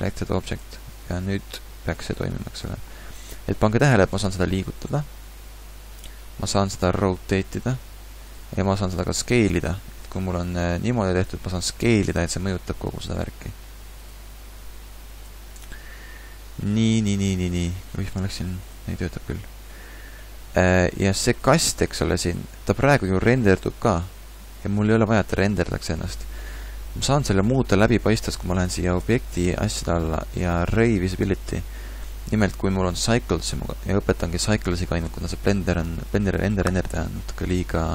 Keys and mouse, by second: 0.6 Tab, 1.5 g, 4.1 g, 4.4-6.1 middle drag, 7.2 r, 10.3 r, 11.8 s, 14.7 r, 15.7 ctrl+z, 15.8 ctrl+z, 18.0 g.